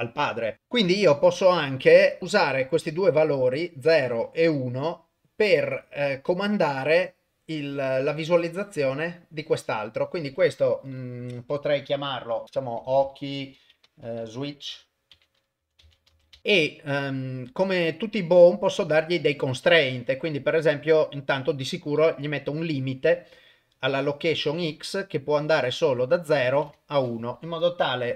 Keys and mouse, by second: 0.5 click, 11.2 F2, 13.0 BackSpace, 18.9 click, 19.9-23.2 drag, 24.7 click, 26.4 click.